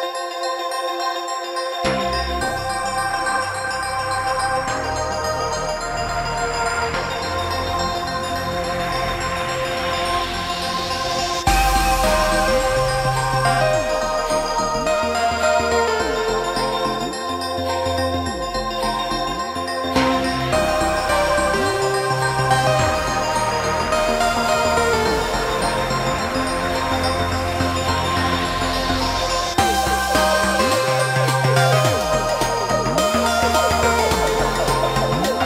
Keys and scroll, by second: 1.5 Delete, 7.6 space, 10.0 s, 13.1 space, 14.0 p, 15.3 space, 16.2 k, 21.2 ctrl+g, 28.0 space, 28.9 p, 33.0 space, 33.2 Escape.